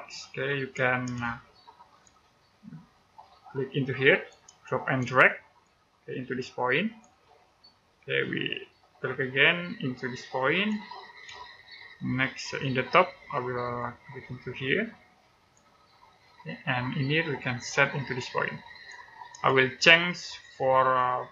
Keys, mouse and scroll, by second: 1.1 middle click, 2.8 click, 5.0 middle click, 6.0 click, 11.2 middle click, 13.6 click, 19.4 middle click.